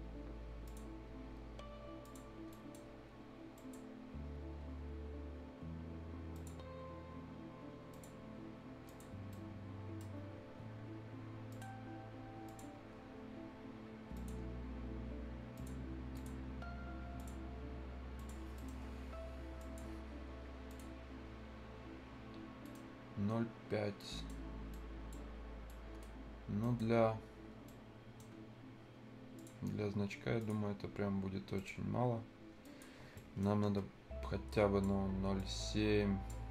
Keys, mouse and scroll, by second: 0.6 click, 0.9 scroll up 1, 2.0 click, 2.2 scroll up 1, 2.5 right click, 3.5 click, 6.3 click, 8.2-8.5 scroll up 1, 8.8 click, 9.1 scroll down 1, 9.3 right click, 10.1-10.5 scroll down 1, 10.5 scroll up 1, 11.5 click, 12.7 scroll down 1, 12.9 scroll up 1, 14.1 click, 14.4-14.7 scroll down 1, 14.7-15.0 scroll up 1, 15.5 click, 18.4 scroll down 1, 18.5 right click, 19.6 click, 20.0-20.7 scroll up 1, 20.7 click, 22.2-22.5 scroll down 1, 22.6 right click, 24.0 right click, 24.4 scroll down 1, 24.7 middle click, 25.3-25.6 scroll down 1, 25.6 right click, 26.1 scroll up 1, 26.6 right click, 26.9 scroll up 1, 27.2-27.6 scroll down 1, 27.6 right click, 28.3-28.7 scroll up 1, 29.3 click, 29.6-30.4 scroll up 1, 30.4 click, 31.4 scroll down 1, 31.5 right click, 31.8-32.3 scroll up 1, 32.6 click, 32.9 scroll down 1, 33.1 right click, 33.6 F10, 33.8-34.4 scroll up 1, 34.5-36.5 drag.